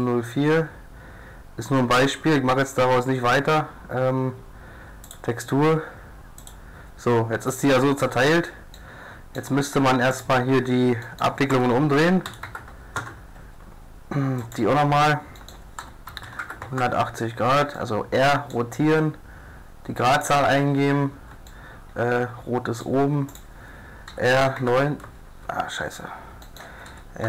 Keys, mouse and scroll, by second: 0.0-1.9 drag, 5.1-7.0 drag, 8.8-10.1 drag, 10.1 right click, 10.2 click, 11.5 r, 14.4-15.8 drag, 15.8 r, 18.5 click, 19.0 click, 19.3 middle click, 20.2 right click, 20.6 click, 21.5 right click, 21.5 middle click, 21.6 right click, 21.7 middle click, 22.0 right click, 22.1-23.3 middle drag, 23.3-25.3 drag, 24.1 r, 26.9 r.